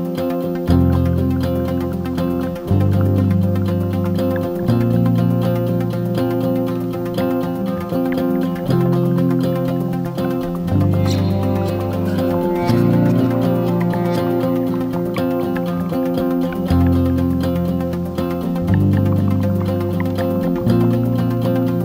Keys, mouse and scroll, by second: 15.1 ctrl+d, 16.1-21.8 drag.